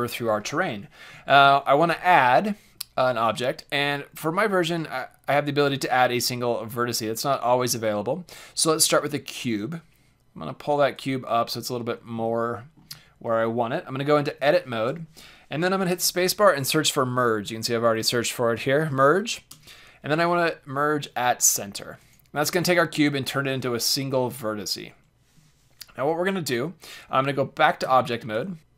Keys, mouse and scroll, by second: 1.2 shift+a, 10.9-12.7 drag, 12.2-15.9 middle drag, 14.3 Tab, 15.9 space, 27.8 Tab, 28.6 KP_5, 28.6 g.